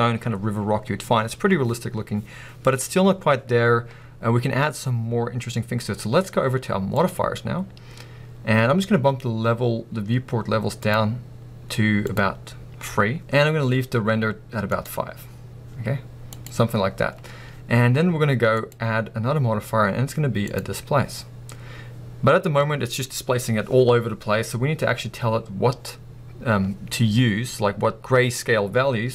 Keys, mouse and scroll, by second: 21.2 scroll down 1.